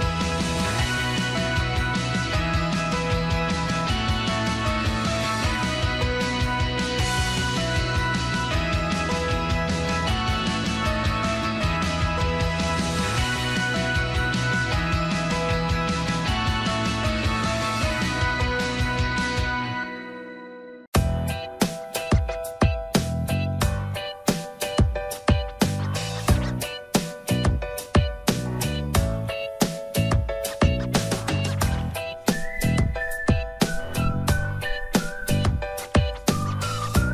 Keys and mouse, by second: 0.0-1.4 drag, 1.8 shift+middle click, 1.9 shift+right click, 2.1 middle click, 2.7 ctrl+z, 2.9 middle click, 4.2 middle click, 4.4 Tab, 4.8-6.5 middle drag, 6.8 Tab, 7.5 shift+middle click, 10.6 shift+middle click, 11.3 middle click, 12.0 shift+middle click, 13.8 click, 16.9 shift+d, 19.3-21.4 drag, 22.1 shift+middle click, 22.9 click, 24.1 m, 25.8 click, 28.5 click, 28.7 click, 29.6 shift+middle click, 30.5 shift+middle click, 31.1 middle click, 32.9 click, 35.8 ctrl+i, 36.9 h.